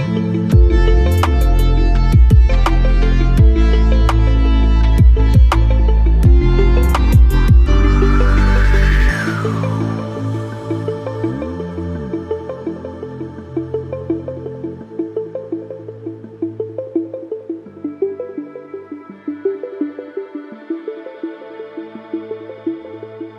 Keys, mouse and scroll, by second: 0.9-1.3 alt+scroll up 2, 3.5 click.